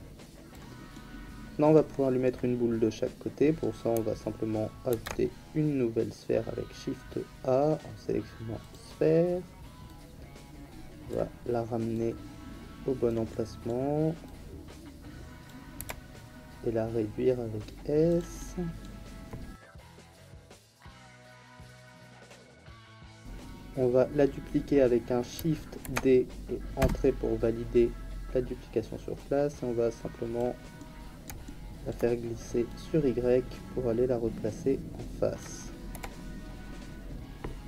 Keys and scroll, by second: 4.9 shift+a, 15.7 s, 20.3 s, 25.8 shift+d, 26.8 Return, 35.9 f.